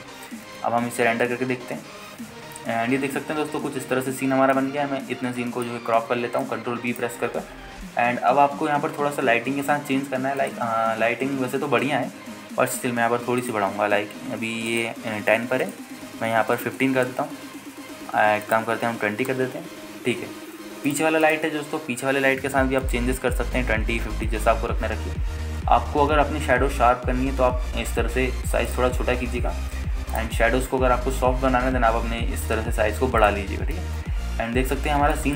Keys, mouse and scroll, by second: 1.0 scroll down 1, 1.6 ctrl+space, 2.4 z, 7.1 scroll up 2, 7.6 alt+shift+middle click, 12.8 ctrl+space, 14.6-21.3 drag, 21.3 scroll down 1, 22.1 click, 22.1-22.4 scroll down 1, 24.4-26.7 drag, 26.7 s, 29.9-32.7 drag, 32.7 s, 34.4-34.7 drag, 35.0 ctrl+space.